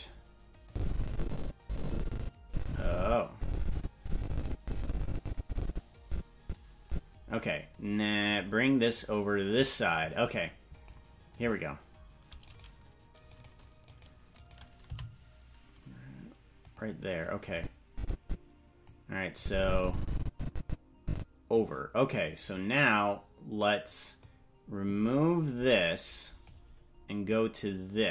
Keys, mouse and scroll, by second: 0.6-6.9 drag, 8.2-10.9 drag, 12.4-14.8 right drag, 14.8 g, 17.5-18.8 drag, 19.3-21.5 drag, 24.2-26.4 drag, 27.2-28.1 drag.